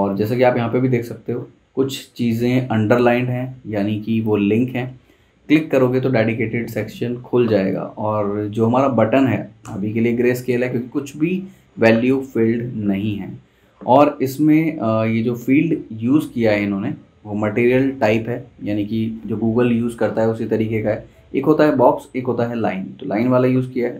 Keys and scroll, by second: 9.6 v.